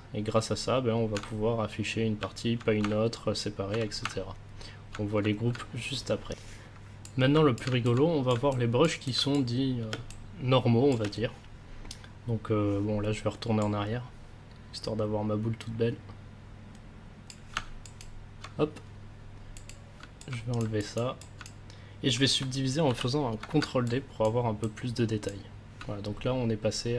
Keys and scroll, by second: 4.5 ctrl+s, 9.9 space, 22.8 ctrl+d.